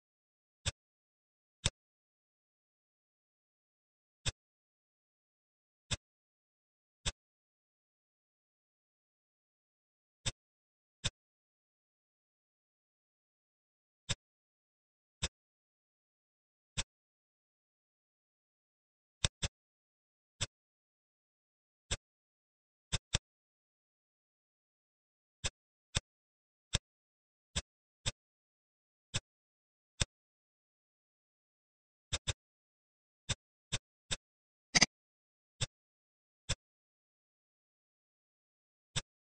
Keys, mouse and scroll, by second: 0.5 drag, 1.4 click, 2.2 s, 4.6-5.8 scroll down 2, 5.8 click, 6.9-8.1 middle drag, 8.1 s, 10.9 click, 12.8 s, 15.1 click, 16.6-18.0 middle drag, 18.0 s, 19.3-20.3 middle drag, 20.3 click, 21.7 click, 22.8 click, 23.0-24.5 middle drag, 25.3 click, 25.8 click, 26.3 scroll up 1, 26.6 middle click, 26.9-27.4 scroll up 2, 27.4 click, 27.9 click, 28.4 Tab, 29.0 click, 29.6 ctrl+r, 32.2 click, 32.9 ctrl+r, 34.0 click, 34.6 click, 35.5 click, 36.4-37.9 middle drag, 38.8 click.